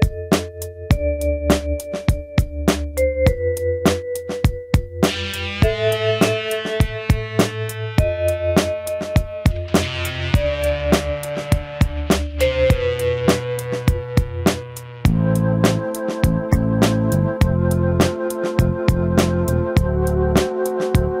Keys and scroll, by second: 17.2 scroll, 18.0 scroll.